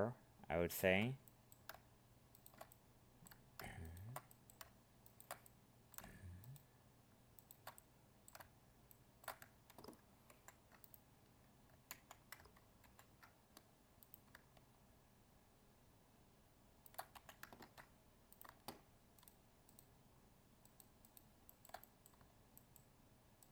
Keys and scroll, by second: 10.3 ctrl+e, 11.9 ctrl+z, 12.8 ctrl+e, 17.6 ctrl+Tab.